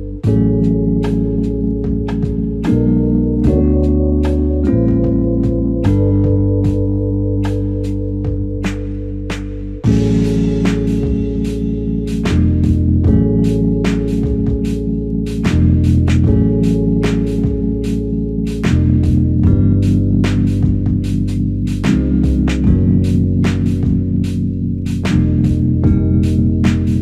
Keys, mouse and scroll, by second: 0.7-1.3 ctrl+scroll down 1.